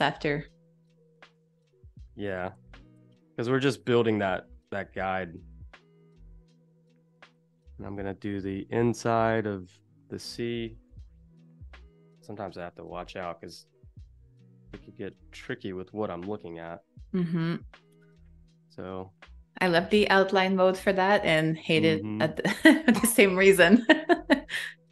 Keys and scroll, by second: 0.4 super+y, 3.1 super+=, 3.3 space, 5.2 p, 7.3 space, 10.1 space, 12.8 super+-, 16.3 super+y, 18.0 a, 20.6 space, 21.2 z, 21.9 space, 23.1 a.